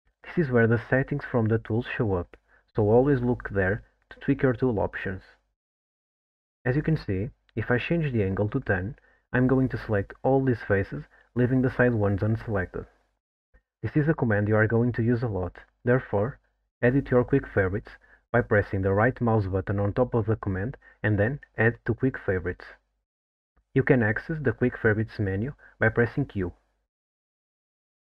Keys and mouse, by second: 6.4-10.5 drag, 14.7 middle click, 16.2-24.5 drag, 25.0 click.